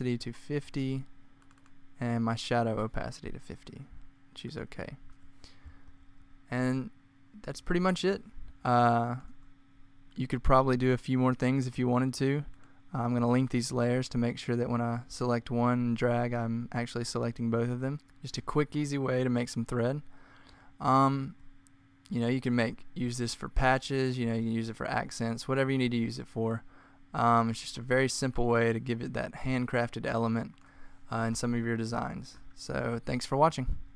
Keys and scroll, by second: 0.1-0.5 typing, 2.6-3.1 typing, 5.8 super+-, 6.1 super+-, 11.9 typing, 17.9 z, 24.8 t.